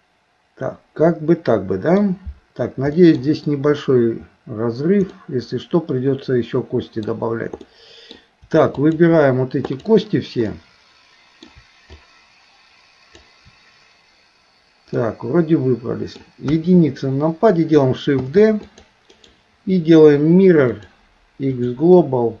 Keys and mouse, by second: 3.0 middle click, 5.2-7.1 middle drag, 7.7 middle click, 8.7 shift+click, 9.7 shift+click, 10.5 middle click, 12.1-13.2 shift+drag, 15.0-16.2 middle drag, 16.5 KP_1, 18.2 shift+d, 19.1-21.7 right drag.